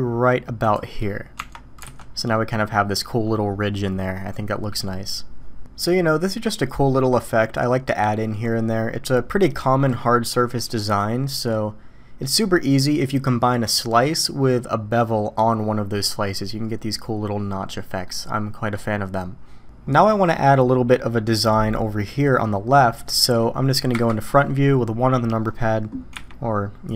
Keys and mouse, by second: 1.4 Tab, 1.8 alt+a, 2.3-3.0 middle drag, 3.0 click, 5.9-7.0 middle drag, 15.9-16.9 middle drag, 18.0-18.7 middle drag, 20.1 middle click, 20.9 middle click, 23.9 KP_1, 26.1 `.